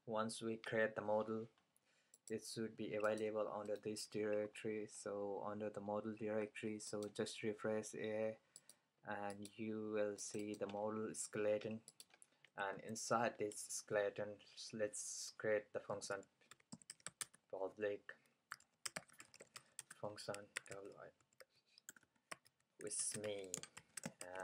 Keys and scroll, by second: 15.7-24.4 typing.